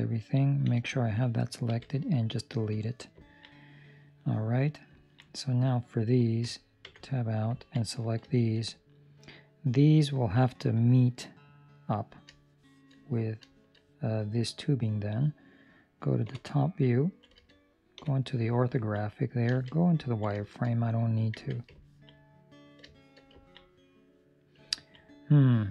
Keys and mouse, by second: 0.6 l, 3.2 ctrl+middle click, 3.4 middle click, 4.9 ctrl+middle click, 5.4 right click, 6.2 Escape, 6.8 Tab, 7.1 right click, 7.5 ctrl+middle click, 7.7 middle click, 8.2 shift+middle click, 8.6 middle click, 12.4 shift+middle click, 12.9 middle click, 13.4 shift+middle click, 14.0 middle click, 16.2 KP_7, 16.9 ctrl+middle click, 17.9 KP_5, 18.6 ctrl+middle click, 19.4 z, 20.1 ctrl+middle click, 20.3 shift+middle click, 21.3 Tab, 21.7 ctrl+middle click, 22.2 middle click, 22.8 shift+middle click, 23.4 ctrl+middle click, 23.6 middle click, 24.6 ctrl+middle click, 25.0 middle click.